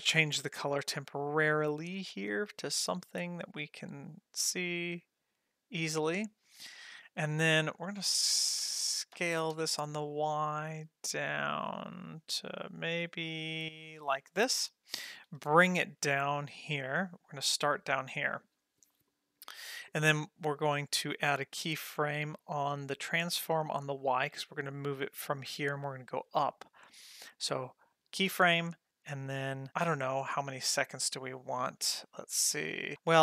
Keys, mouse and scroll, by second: 0.5 click, 1.6 click, 2.4-5.7 drag, 6.8 click, 9.2 s, 15.1 g, 22.5 drag, 23.0 scroll down 2, 27.5 click, 29.7 ctrl+middle click, 31.0 middle click, 31.4 middle click, 32.0-32.9 drag, 32.9 ctrl+middle click.